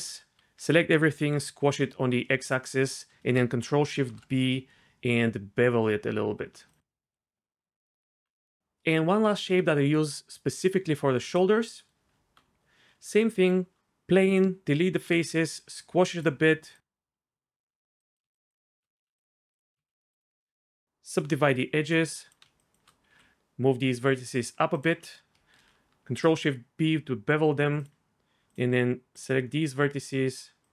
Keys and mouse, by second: 0.0 s, 0.4 a, 1.0 s, 1.3 x, 2.4 click, 4.0 ctrl+shift+b, 6.7 click, 7.9 Tab, 8.6 shift+a, 9.3 shift+a, 12.1 Tab, 13.3 x, 14.9 a, 15.1 s, 15.3 x, 16.1 click, 18.3 shift+click, 19.0 2, 19.2 click, 19.5 1, 19.8 ctrl+z, 20.2-21.1 drag, 21.5 1, 22.1 click, 23.1 g, 23.1 f, 23.3 z, 25.6 ctrl+shift+b, 27.8 click.